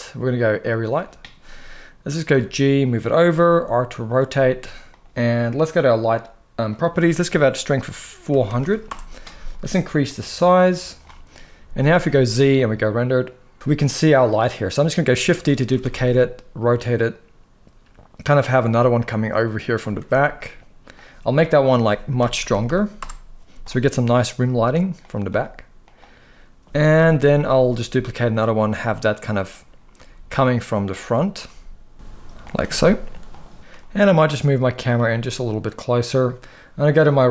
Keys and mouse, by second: 2.0 g, 2.7 click, 3.1 r, 3.9 click, 4.0 g, 6.4-8.6 drag, 8.3 0, 9.9 click, 11.8 z, 15.1 shift+d, 15.4 r, 15.5 r, 18.9 r, 19.7 r, 19.9 r, 21.4-22.7 drag, 22.3 0, 22.4 0, 24.3 g, 24.7-25.0 drag, 25.0 s, 26.7 KP_7, 27.5 shift+d, 28.1-28.4 drag, 28.4 r, 29.0 right click, 29.6 r, 30.8 click, 31.2 g, 32.1 click, 32.4 r, 33.3 g, 33.6 x, 34.8 g, 35.7 click, 37.0 click.